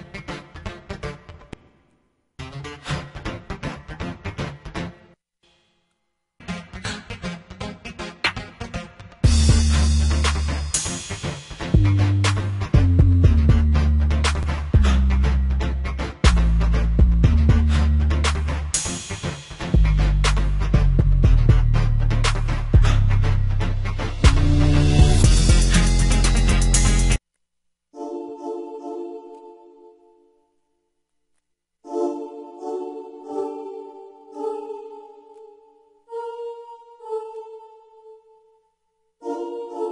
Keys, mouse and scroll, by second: 21.0 click, 26.1 F1, 29.6 ctrl+b, 30.0 F1, 30.0 r, 30.4 space, 30.6 ctrl+m.